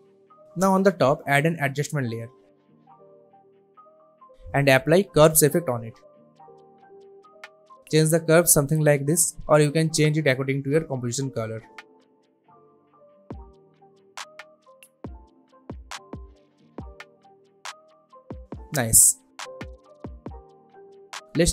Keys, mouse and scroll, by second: 1.1 right click, 1.7 click, 5.1 click, 5.5-7.1 typing, 7.6-10.1 drag, 17.7 space, 19.9 space, 20.4-21.5 drag.